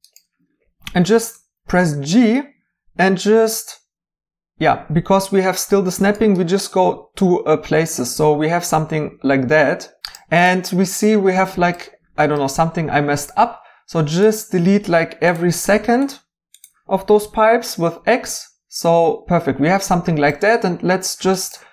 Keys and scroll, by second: 1.3 g, 17.2 x.